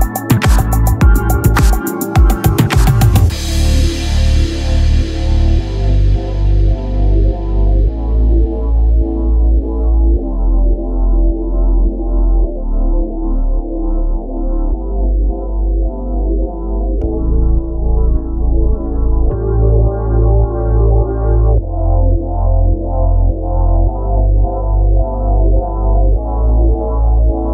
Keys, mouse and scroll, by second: 2.3-4.7 right drag, 4.7 c, 5.4 z, 5.7 c, 6.2 click, 6.6 z, 8.9 KP_1, 9.4 z, 11.3 z, 13.4 Tab, 14.7 KP_7, 15.2-16.9 drag, 18.8 middle click, 19.2-20.2 drag, 21.4 s, 24.5 KP_3, 24.9 z, 25.7 click, 26.1 s.